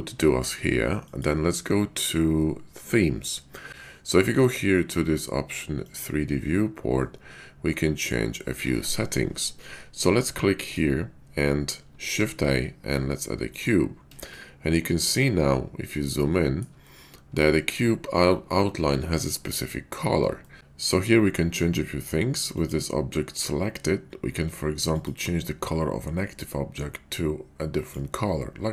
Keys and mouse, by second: 12.1 shift+a, 14.3 shift+middle click, 16.3 shift+middle drag, 16.8-17.4 middle drag, 17.5 shift+middle click, 20.5 shift+middle click.